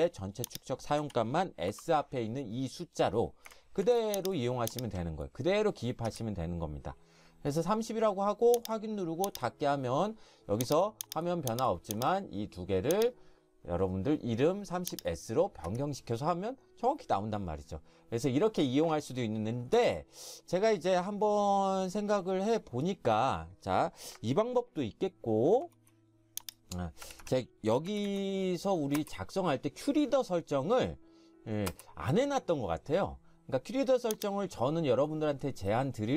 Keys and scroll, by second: 1.0 3, 1.7 0, 3.9 ctrl+shift+1, 6.1 Escape, 6.1 ctrl+shift+1, 15.7 Escape, 19.7 Escape, 25.6 ctrl+F4, 27.1 Escape, 27.2 Escape, 27.9-28.9 typing, 31.7 space.